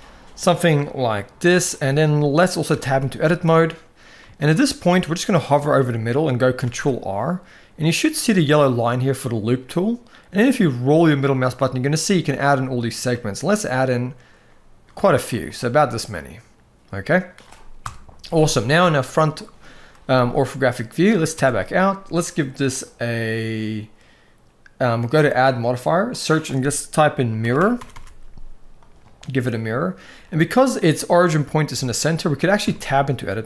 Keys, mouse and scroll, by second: 2.4 Tab, 2.8-3.2 shift+middle drag, 4.1 shift+middle click, 4.5 middle click, 6.4 ctrl+r, 15.8-17.1 middle drag, 17.6 KP_1, 18.5 shift+middle click, 20.1 shift+middle click, 21.1 Tab, 22.4 click, 25.3-28.7 drag, 27.6 r, 31.5-31.9 shift+middle drag, 32.4 Tab.